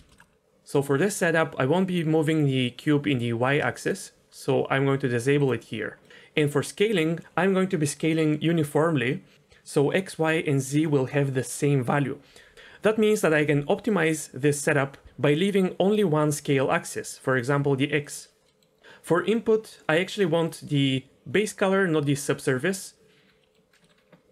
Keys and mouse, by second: 0.0 shift+middle click, 0.2 click, 2.6-3.8 drag, 5.4 click, 17.3 click, 18.0 click, 18.5 middle click, 20.4-21.5 drag, 23.4 middle click, 23.8 middle click.